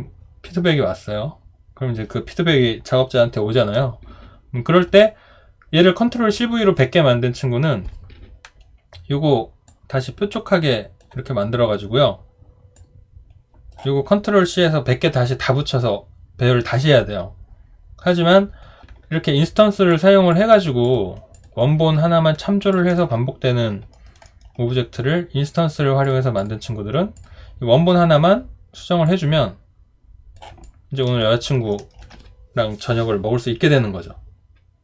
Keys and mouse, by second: 22.7 alt+click, 23.9 alt+right click, 24.2 alt+middle click, 30.6 alt+click, 31.2 alt+right click, 31.7 alt+middle click.